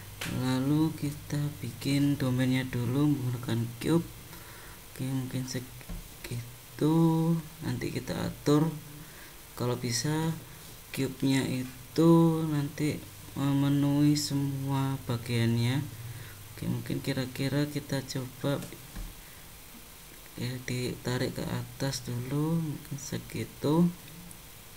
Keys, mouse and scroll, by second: 0.2 click, 1.1 shift+a, 4.3 super+click, 5.3 Tab, 6.2 click, 7.0 click, 8.6 Tab, 10.1 click, 12.1 click, 15.5 click, 16.3 click, 18.5 shift+middle click, 20.1 g.